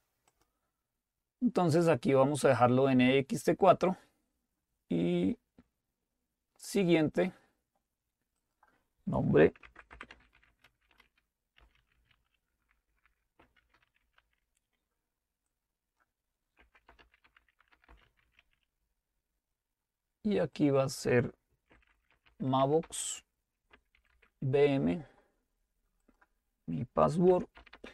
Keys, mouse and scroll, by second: 0.3 click, 0.8 click, 7.1 click, 8.4-9.6 drag, 9.4-18.9 typing, 15.4-17.0 drag, 20.7-21.7 drag, 21.5-24.6 typing, 26.1 click, 27.0-27.9 typing.